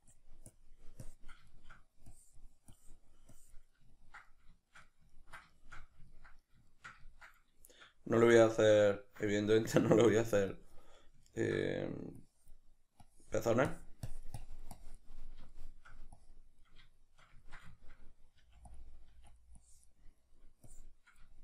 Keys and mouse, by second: 1.5 shift+middle click, 2.1-3.9 drag, 3.9-12.2 ctrl+middle drag, 12.2-15.2 drag, 15.2-16.2 middle drag, 16.2 click, 16.6-18.8 middle drag, 18.4 f, 18.8 click, 19.1 f, 19.4 click, 20.2 middle click, 20.7 click, 21.3-21.4 shift+middle drag.